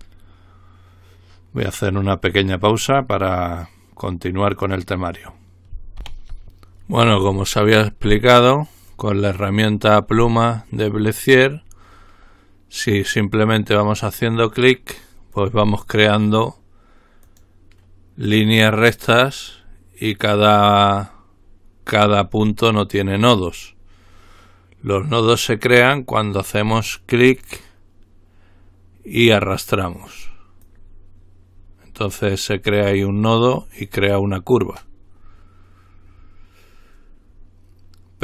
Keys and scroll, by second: 6.4 ctrl+r.